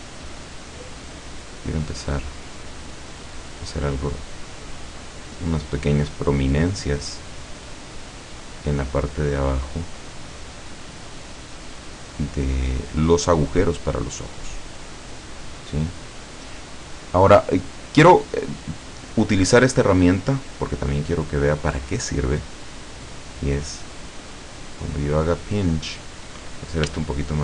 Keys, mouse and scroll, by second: 0.5-1.6 drag, 1.9-5.6 drag, 5.8-7.0 drag, 7.1-9.6 drag, 9.9 click, 10.9-14.9 drag, 14.9-15.2 scroll down 2, 15.8-16.4 scroll up 2, 16.9 click, 19.9 click, 21.0-21.4 scroll up 2, 24.0-26.3 drag, 26.9 f.